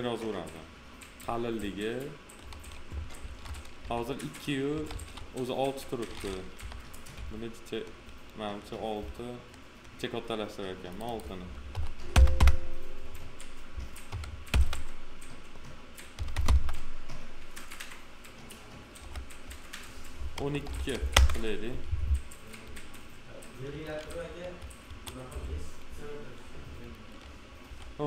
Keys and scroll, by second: 3.1 ctrl+z, 3.8 f, 4.8 ctrl+z, 6.5 p, 11.7 8, 12.0 Return, 14.0 8, 14.4 Return, 16.1 1, 16.3 Return, 18.9 0, 20.3 BackSpace, 20.6 1, 21.1 Return, 24.3 F4, 27.6 f.